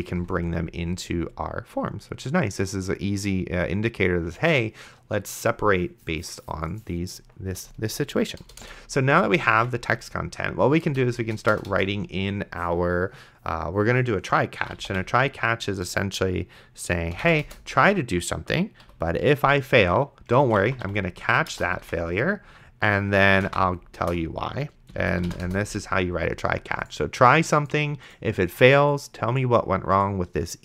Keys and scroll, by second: 8.7 Return, 9.8 ctrl+s, 10.9 Return, 11.5 BackSpace, 14.4-15.4 typing, 17.1 space, 17.5 Return, 18.8 Down, 20.2-22.3 typing, 23.5 3, 24.0 BackSpace, 24.1 e, 24.9 End, 25.1 space, 25.5 Return.